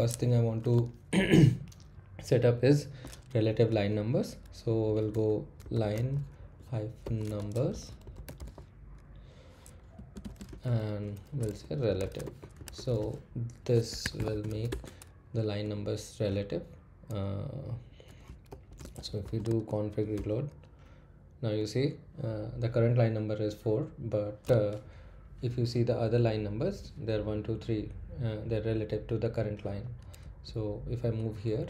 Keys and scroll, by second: 4.8-15.0 typing, 14.0 Escape, 18.2-19.7 typing, 20.1 Return, 30.2 Up.